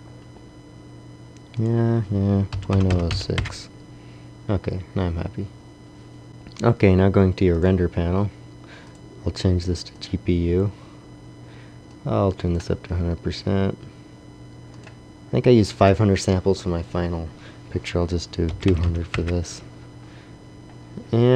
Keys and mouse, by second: 1.5-3.0 drag, 2.8 KP_0, 7.4 middle click, 7.6-10.4 drag, 13.6-17.4 drag, 18.7 KP_0.